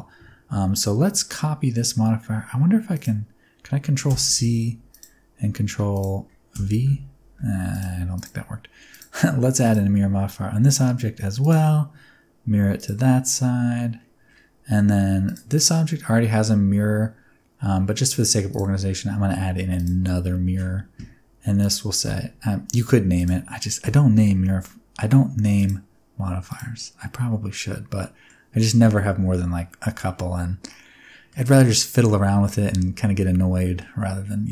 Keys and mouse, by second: 2.9 click, 4.0 ctrl+c, 4.8 click, 6.5 ctrl+v, 7.7 click, 9.0-9.9 drag, 11.4 click, 15.5 click, 18.6-19.8 drag, 21.7-23.2 drag, 25.5 click, 26.9-28.2 middle drag, 30.7 middle click, 32.0-33.8 middle drag.